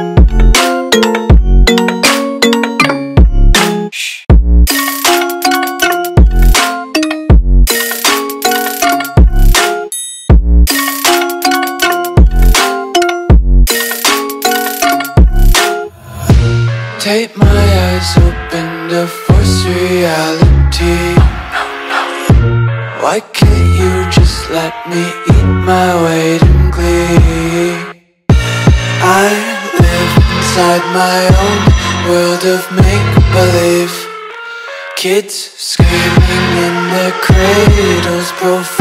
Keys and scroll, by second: 0.1 super+space, 0.2 super+space, 0.4 super+space, 0.5 super+space, 0.8-1.1 super+space, 1.7 super+space, 1.8 super+space, 1.8 super+space, 2.0 super+space, 2.3 super+space, 2.7-5.4 typing, 9.8 space, 10.3 super+space, 10.5 super+space, 12.7 space, 13.2 alt+super+space, 13.3 alt+super+space, 13.5 alt+super+space, 13.6 alt+super+space, 13.6 alt+super+space, 13.8 alt+super+space, 14.3 typing, 15.3 typing, 16.4 space, 18.1 space, 18.6 super+space, 18.7 super+space, 18.8-19.2 super+space, 20.5 space, 21.0 alt+super+space, 21.1 alt+super+space, 21.2 alt+super+space, 21.3 alt+super+space, 21.3 alt+super+space, 21.4 alt+super+space, 21.5 alt+super+space, 21.7 alt+super+space, 22.3 alt+super+space, 22.6 alt+super+space, 22.6 alt+super+space, 23.2 super+space, 23.5 super+space, 23.6 super+space, 24.1 super+space, 24.7 alt+super+space, 24.7 alt+super+space, 24.8 alt+super+space, 24.9 alt+super+space, 25.0-25.3 alt+super+space, 27.4 Tab, 33.1 space, 33.6 super+space, 33.7 super+space, 33.9 super+space, 34.4 super+space, 35.1 super+space, 36.8 space, 37.3 alt+super+space, 37.4 alt+super+space, 37.6 alt+super+space, 37.7 alt+super+space.